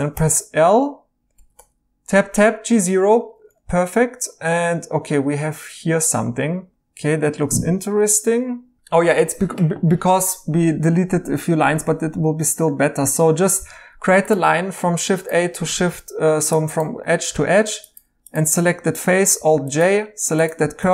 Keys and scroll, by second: 0.1 i, 1.3 Tab, 1.5 typing, 11.4 Escape, 13.5 a, 15.7 ctrl+z, 17.6 Tab, 19.3 alt+j, 19.8-20.8 typing.